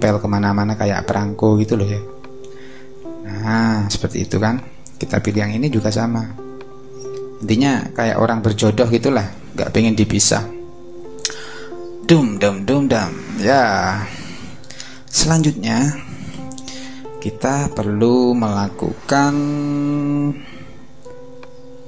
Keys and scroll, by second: 16.8 super+-.